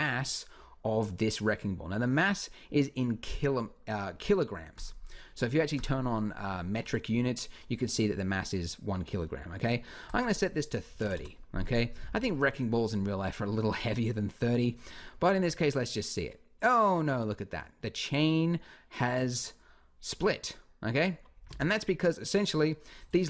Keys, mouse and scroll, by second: 4.5-8.5 drag, 9.9-11.7 drag, 11.8 alt+a, 18.8-20.2 middle drag, 21.3 Escape.